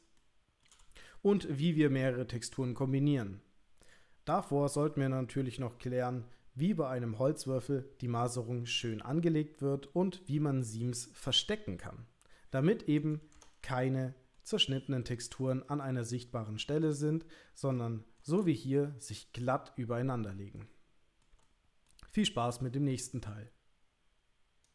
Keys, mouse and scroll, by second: 0.2 shift+middle click, 13.8 ctrl+middle click, 16.0 shift+middle click, 17.8 ctrl+middle click, 18.5 shift+middle click, 20.6 ctrl+middle click, 21.4 middle click.